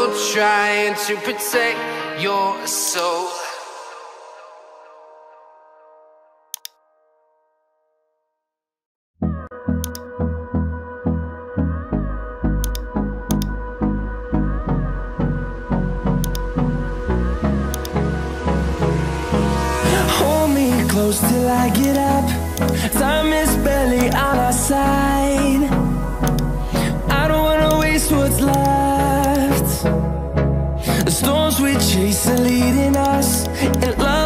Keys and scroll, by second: 5.4 Return, 7.8 ctrl+x, 7.9 ctrl+s, 14.5 ctrl+t, 20.1 Return.